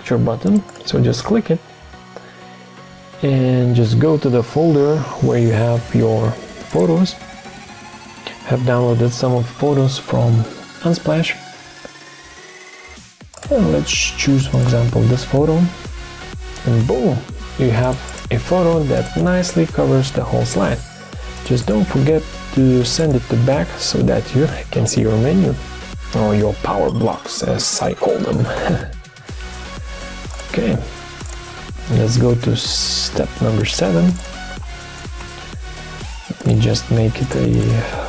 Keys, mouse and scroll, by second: 31.5 ctrl+d, 35.0 BackSpace, 35.2 7.